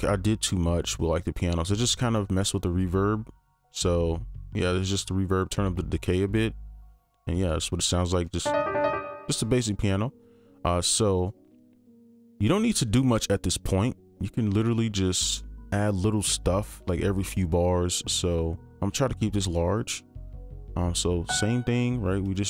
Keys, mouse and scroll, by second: 8.2-9.4 typing, 12.0 right click, 14.1-16.6 scroll up 1, 19.1-21.2 scroll up 1.